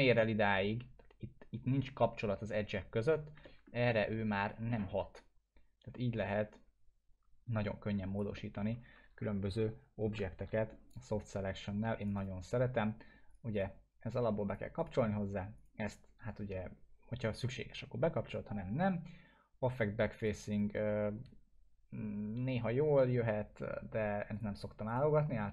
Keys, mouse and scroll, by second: 3.4 alt+middle click, 4.4 click, 4.5-8.2 drag, 8.3 alt+middle click, 9.2 ctrl+z, 10.5 alt+middle click, 12.0 click, 20.2 click, 24.3 click.